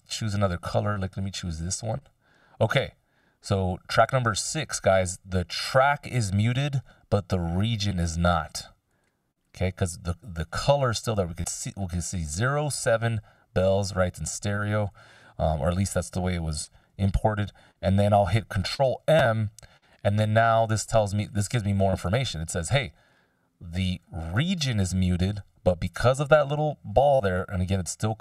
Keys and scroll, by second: 19.0 ctrl+m.